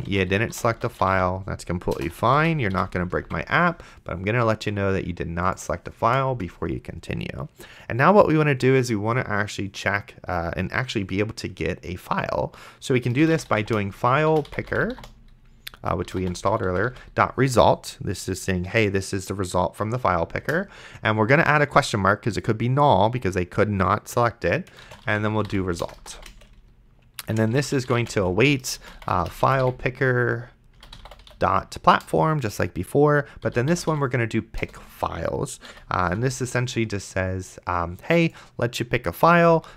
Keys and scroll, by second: 0.0-2.7 typing, 3.5 ctrl+s, 6.3 Return, 13.1-17.4 typing, 20.7 shift+/, 24.7-31.8 typing, 32.0 Return, 33.2-34.4 typing, 34.6 Return, 35.7 End, 36.1 ;.